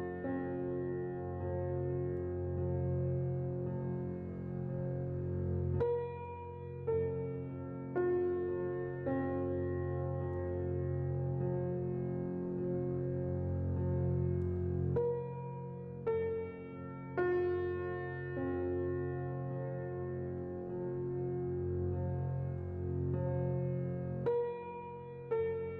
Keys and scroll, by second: 0.6-1.3 typing, 11.5 z, 15.6 1, 16.2 0, 16.3 Return, 19.5 c, 22.1 z.